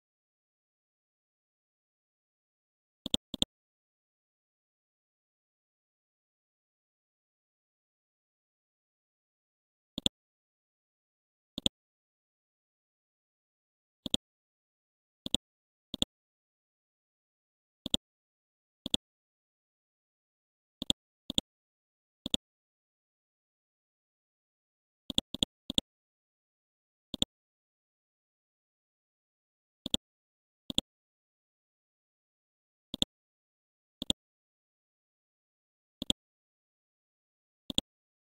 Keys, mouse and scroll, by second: 0.8 scroll down 1, 3.1 click, 3.7-4.2 scroll down 1, 4.2-4.5 scroll up 1, 10.0 click, 10.5 scroll up 1, 11.6-13.4 drag, 13.4 scroll up 1, 14.1 ctrl+click, 15.2 click, 16.6 scroll down 1, 17.3 scroll up 1, 17.9 click, 18.9 ctrl+click, 20.8 ctrl+click, 22.3 ctrl+click, 23.8-24.1 scroll down 1, 25.1-29.0 drag, 29.0 Left, 29.3 Left, 29.5 Left, 29.9 click, 32.2 scroll up 1, 33.0 ctrl+click, 34.0 click, 36.0 click, 36.8-37.3 scroll up 1, 37.7 ctrl+click.